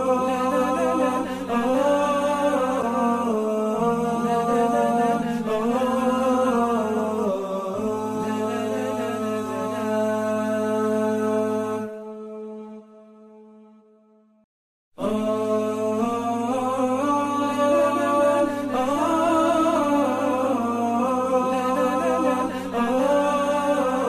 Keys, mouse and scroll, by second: 18.2 space, 19.2 ctrl+0, 19.8 double click, 20.7 alt+click, 23.3 double click.